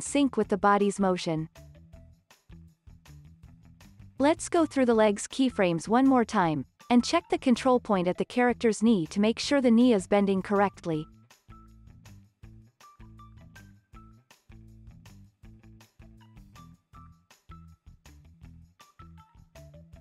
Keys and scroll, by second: 6.2 space, 6.8 alt+z, 8.6 alt+x, 9.5 alt+z, 10.3 alt+x, 10.5 alt+z, 12.7 super+Left, 13.2 super+Up, 13.6 super+Left, 14.7 x, 16.1 super+Right, 17.1 alt+x, 17.8 super+Right, 18.4 super+Down, 19.5 alt+x.